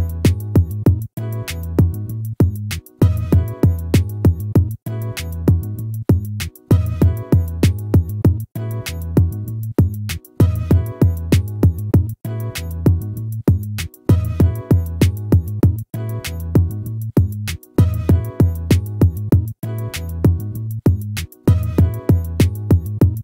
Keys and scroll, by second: 9.0 ctrl+-, 12.7 ctrl+-.